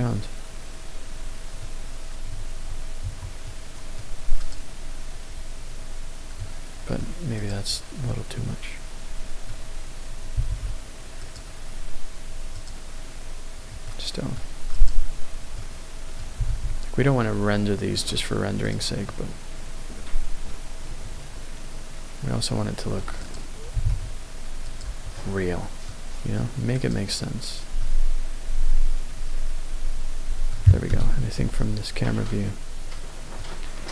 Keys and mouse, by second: 0.8-2.4 middle drag, 2.4 Tab, 3.1 Tab, 4.4 click, 7.4 click, 8.0-9.5 middle drag, 10.3 g, 10.6 z, 11.3 click, 12.6 click, 14.7 click, 16.3 g, 16.5 z, 18.0 click, 19.3-23.1 middle drag, 23.1 click, 23.7 g, 23.9 z, 24.7 click, 25.8-26.7 middle drag, 26.7 click, 28.1-30.5 middle drag, 30.9 KP_0, 33.4-33.9 middle drag.